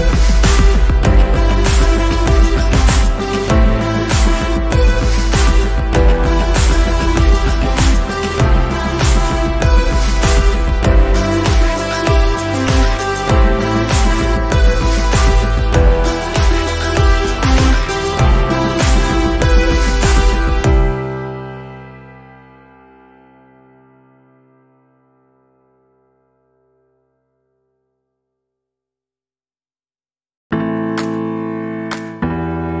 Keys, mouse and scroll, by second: 1.1-3.3 drag, 3.4-3.8 ctrl+scroll down 1, 4.1 space, 4.4 click, 4.6 space, 5.1-5.4 ctrl+scroll up 1, 6.0 click, 6.0-8.5 drag, 9.3-10.4 ctrl+scroll down 2, 10.4 v, 11.1 shift+click, 11.7-12.3 click, 12.4 ctrl+z, 13.1 click, 13.9-14.2 ctrl+scroll up 1, 14.4 click, 15.0-15.8 ctrl+scroll up 1, 16.2 click, 19.4 Delete, 20.8-23.9 drag, 28.6-29.2 alt+drag, 30.4-32.6 alt+drag.